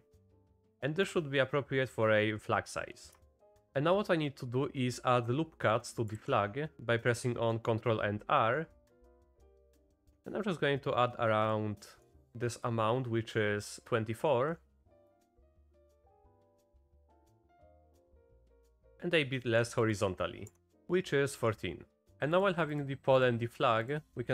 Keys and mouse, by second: 0.2 click, 0.8 shift+click, 3.1 Tab, 3.6 Tab, 6.2 ctrl+r, 15.1 ctrl+r, 15.8 ctrl+r, 22.7 click, 23.2 click, 23.8 click.